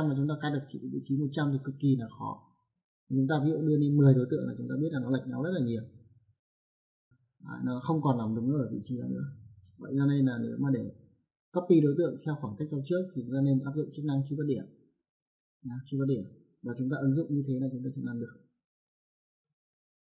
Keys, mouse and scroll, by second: 3.7 click, 4.8 KP_0, 6.0 click, 9.5 click, 14.4 click, 16.4 right click, 19.7 click.